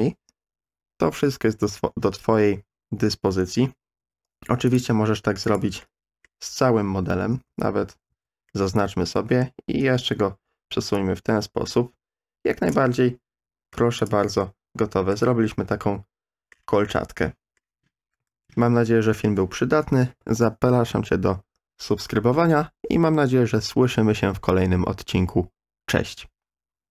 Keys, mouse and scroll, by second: 4.0 3, 4.7 click, 5.4 click, 5.8-6.2 middle drag, 7.0 l, 7.3 l, 8.1 a, 8.5-9.4 middle drag, 9.6 KP_1, 10.1 KP_3, 11.0-12.7 drag, 12.9-13.7 middle drag, 14.1 click, 14.2 Tab, 14.4-15.1 middle drag, 15.7-16.5 middle drag, 16.9-17.6 middle drag, 18.3 ctrl+z, 18.9 ctrl+z, 19.2 ctrl+z.